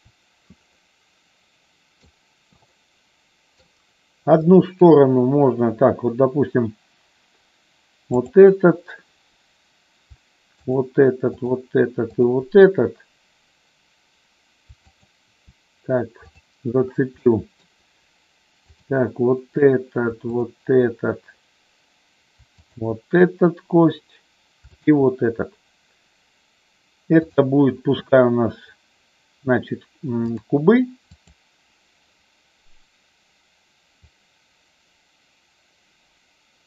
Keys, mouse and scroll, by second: 2.7 middle click, 4.5 middle click, 8.1-9.5 drag, 10.6-12.1 shift+drag, 14.9-16.3 shift+drag, 17.3 middle click, 18.8 click, 20.4-21.9 shift+drag, 24.7-26.4 shift+drag, 27.4-30.5 drag, 31.4 click, 34.0-36.6 drag.